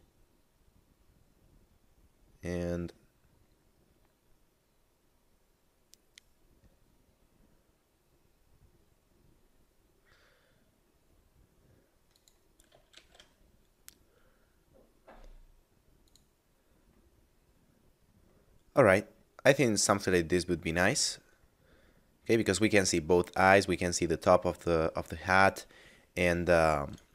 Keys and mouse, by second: 0.0 middle click, 12.2 click, 12.9 shift+f, 16.0 click, 21.8 middle click, 26.8 right click.